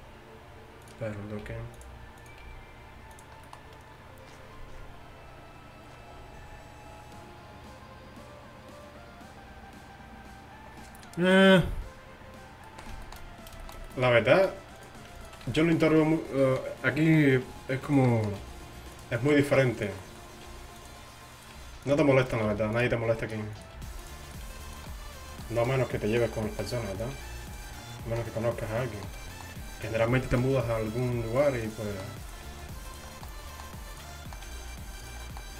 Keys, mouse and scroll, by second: 1.5 g, 2.5 g, 12.7-14.2 middle drag, 15.5 z, 15.9 z, 17.5 r, 18.5 g, 20.5 g, 21.6 g, 22.5 g, 23.8 g, 24.5 g, 27.2 g, 30.1-32.1 drag, 30.6 g, 31.6 g, 32.5 g, 33.2 middle click, 34.5 g.